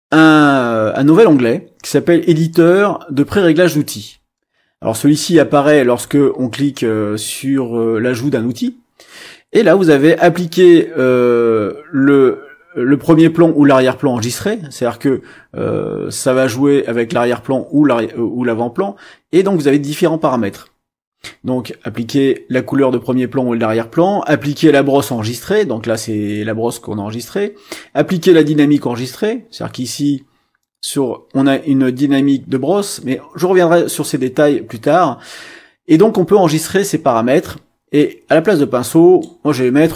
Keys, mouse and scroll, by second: 38.0-39.4 drag.